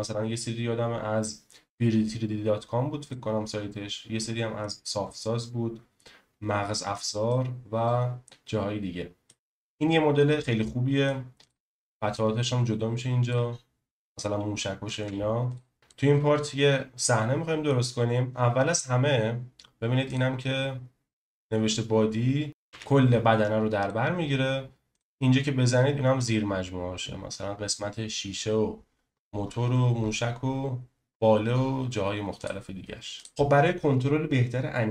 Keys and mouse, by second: 3.1-4.6 middle drag, 7.3-9.3 middle drag, 9.3-11.1 middle drag, 11.4 click, 12.1 click, 15.0 ctrl+z, 15.9-17.7 middle drag, 20.1 click, 22.7 g, 23.8-25.1 drag.